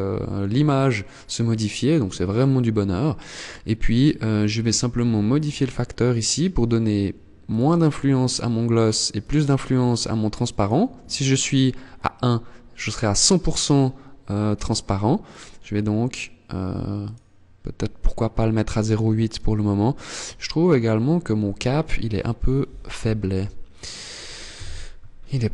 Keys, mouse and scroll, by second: 1.4 scroll up 1, 4.6 click, 6.4 click, 7.3 click, 8.4 click, 9.0 click, 9.8 click, 14.1 click, 16.4 click, 18.8 scroll up 2, 22.0 z, 23.9 KP_1, 24.5 scroll up 4, 25.1 shift+middle click.